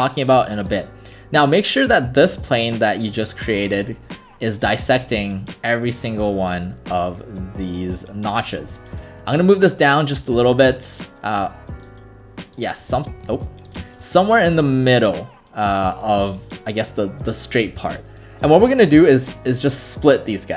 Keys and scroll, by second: 13.3 ctrl+shift+z.